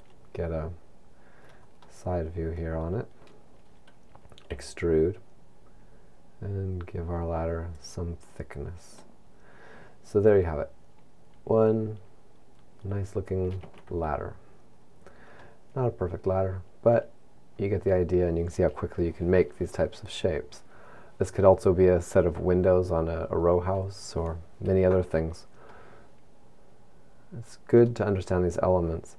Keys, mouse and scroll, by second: 1.9 middle click, 3.3 scroll up 1, 4.6 e, 7.9 click, 8.4-9.1 scroll down 3, 9.1 middle click, 13.7 Tab, 14.9 scroll up 1, 15.4 middle click, 18.2 middle click, 25.7 middle click.